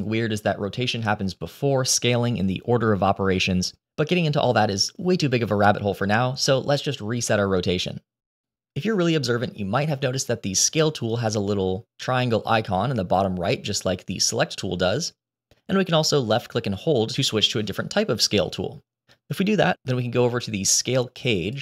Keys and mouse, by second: 16.6-21.4 drag.